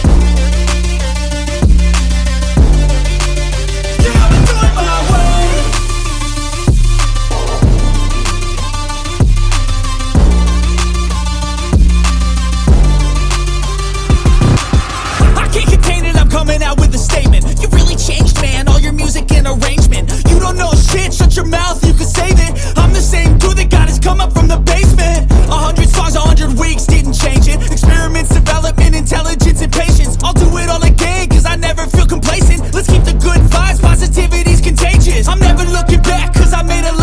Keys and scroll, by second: 0.6 ctrl+a, 1.1 BackSpace, 1.3 ctrl+v, 3.9 ctrl+t, 9.1 ctrl+space, 12.7 ctrl+t, 27.3 alt+BackSpace.